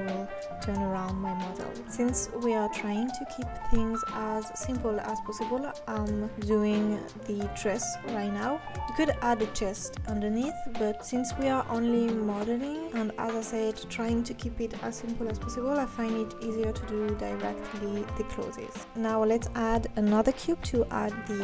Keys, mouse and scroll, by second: 0.8 click, 1.2 g, 2.3-2.7 scroll up 5, 2.9 Tab, 3.3 shift+a, 4.6-5.8 scroll down 5, 5.8 scroll down 2, 6.0 g, 6.8 s, 7.5 g, 8.3-10.7 drag, 10.8-12.7 drag, 13.8-15.4 scroll up 8, 17.0 Tab, 17.6 Tab, 18.0 g, 19.2 Tab, 19.4 click, 19.6 g, 20.0 r, 20.8 scroll down 2, 21.0 e.